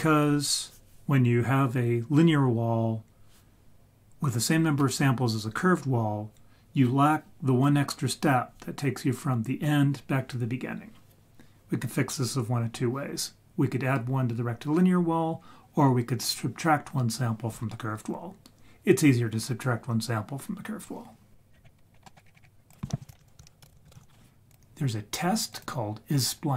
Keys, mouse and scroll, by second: 21.5-22.1 scroll down 6, 22.0 middle click, 22.2-23.0 scroll up 6, 22.7 click, 23.1 shift+a, 26.2-26.5 drag.